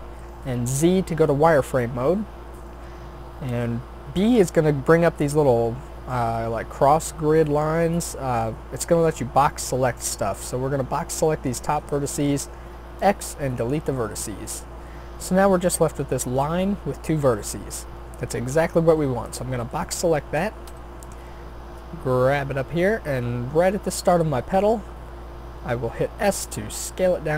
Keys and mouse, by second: 0.7 z, 4.2 b, 13.0 x, 19.0 b, 20.7 g, 25.0 s.